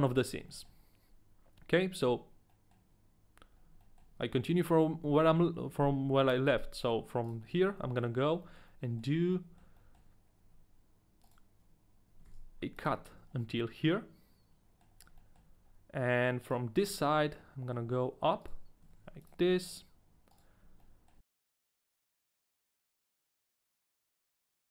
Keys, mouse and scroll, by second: 0.7 shift+middle click, 0.9-1.9 scroll up 1, 1.9 right click, 2.5 middle click, 3.5 scroll up 1, 4.0 right click, 4.0 middle click, 4.0-5.0 scroll up 1, 5.2 a, 7.2 right click, 7.5 scroll down 1, 7.8 middle click, 8.1-8.7 scroll down 3, 8.6 right click, 8.6 shift+middle click, 8.7 middle click, 9.0 scroll up 1, 9.3 middle click, 10.0 shift+middle click, 10.0-10.5 scroll up 2, 11.6 shift+middle click, 11.6 ctrl+right click, 11.6-12.2 scroll up 2, 12.4 ctrl+e, 12.4 shift+middle click, 12.4 ctrl+right click, 12.4-12.8 scroll up 1, 13.1 a, 13.2 scroll down 2, 13.5 middle click, 14.9-16.1 scroll up 2, 15.4 shift+middle click, 15.4 a, 16.4 right click, 17.8 shift+middle click, 17.8 right click, 17.8 scroll up 1, 18.6 ctrl+right click, 18.6 shift+middle click, 19.0 ctrl+e, 19.0 ctrl+right click, 19.0 shift+middle click, 19.5 middle click, 20.3 right click, 21.2 ctrl+e, 21.2 ctrl+right click, 21.2 shift+middle click, 21.3 right click, 21.3 a, 21.4 right click, 21.4 shift+middle click, 21.5 middle click, 21.6 scroll down 2, 21.7 middle click, 22.0 ctrl+e, 22.0 middle click, 22.0 ctrl+right click, 22.0 scroll up 1, 22.1 right click, 22.1 middle click, 22.2 shift+middle click, 22.2 scroll down 1, 22.3 ctrl+right click, 22.3 right click, 22.4 shift+middle click, 22.6 ctrl+e, 22.6 ctrl+right click, 22.6 shift+middle click, 22.8 a, 22.8 right click, 22.8 middle click, 22.9 scroll up 1, 23.0 shift+middle click, 23.0 ctrl+e, 23.0 ctrl+right click, 23.1 a, 23.2 middle click, 23.2 scroll down 4, 23.2 middle click, 23.2-23.8 scroll up 7, 23.4 shift+middle click, 23.4 middle click, 23.5 shift+middle click, 23.6 middle click, 23.6 right click, 23.7 middle click, 23.8 right click, 23.8 shift+middle click, 23.8 middle click, 23.9 middle click, 23.9 shift+middle click, 23.9 middle click, 24.0 shift+middle click, 24.1 ctrl+e, 24.1 ctrl+right click, 24.2-24.7 typing, 24.4 right click, 24.4 middle click, 24.5 scroll down 1, 24.5 scroll up 1, 24.6 scroll down 1, 24.6 shift+middle click.